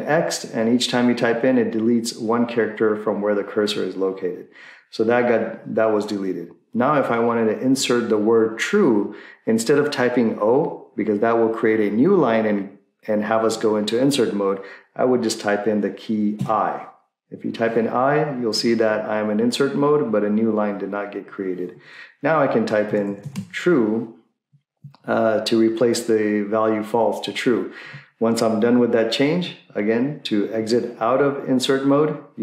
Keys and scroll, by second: 22.6-23.8 typing.